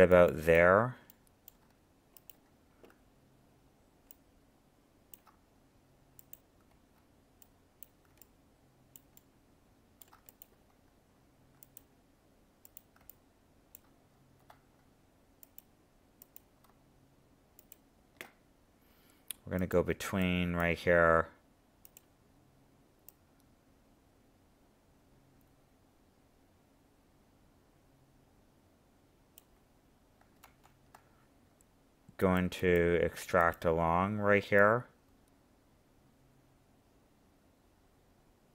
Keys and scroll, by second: 30.4 ctrl+z.